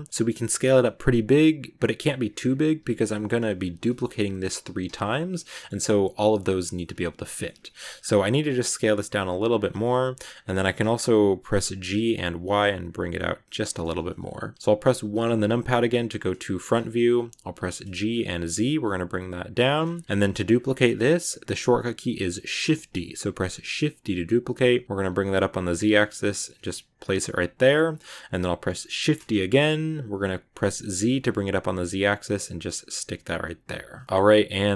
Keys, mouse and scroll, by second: 0.1 middle click, 0.3 s, 1.9 s, 2.7 shift+d, 3.7 shift+d, 4.5 g, 5.3 scroll down 1, 5.4-6.8 middle drag, 6.8 ctrl+z, 7.0 ctrl+z, 7.2 middle click, 7.4 ctrl+z, 7.6-7.9 ctrl+scroll up 3, 7.6 middle click, 8.6 s, 9.7 middle click, 10.2 scroll up 2, 10.5-11.7 middle drag, 11.7 g, 15.0 KP_1, 16.4-17.5 shift+middle drag, 17.5 g, 19.7 scroll down 1, 19.8 shift+middle click, 20.0 scroll up 1, 22.4 shift+d, 28.9 shift+d, 34.0-34.7 middle drag.